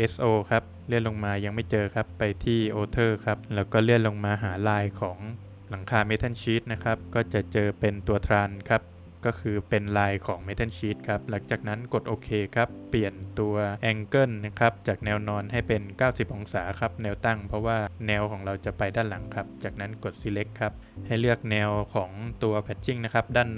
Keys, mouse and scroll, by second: 0.7-1.6 scroll up 3, 1.6 click, 2.9-4.0 scroll down 3, 4.2 scroll down 1, 6.3 scroll down 2, 7.0 click, 8.9 click, 10.7 click, 13.7 click, 15.2 click, 19.6 click.